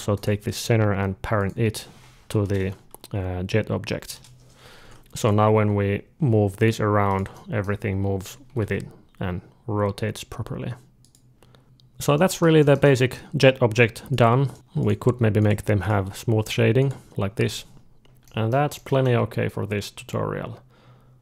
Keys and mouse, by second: 0.0-4.0 drag, 2.2 ctrl+p, 4.7 alt+a, 5.0 alt+a, 5.0 g, 5.0-7.0 drag, 5.4 d, 6.3 g, 7.2 middle click, 7.6 g, 8.3 r, 11.6 middle click, 11.6 alt+a, 12.0-13.9 middle drag, 13.9 click, 14.0 alt+a, 14.0 right click, 14.3 middle click, 14.6-17.2 drag, 15.7-17.7 right drag, 17.2 alt+a, 17.7-20.9 middle drag.